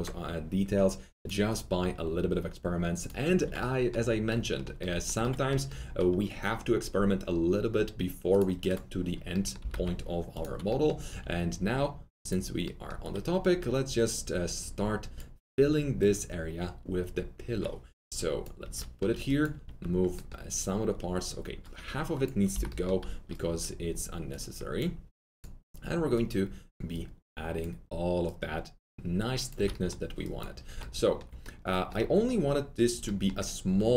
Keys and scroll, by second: 9.4-11.0 typing, 18.6 F3, 29.5 F3.